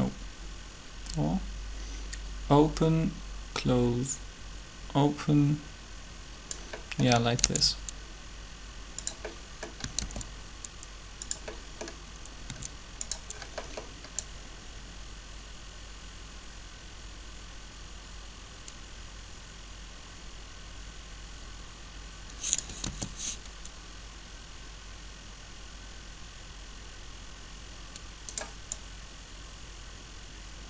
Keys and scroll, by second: 7.4 shift+d, 10.0 shift+d, 22.8 alt+a.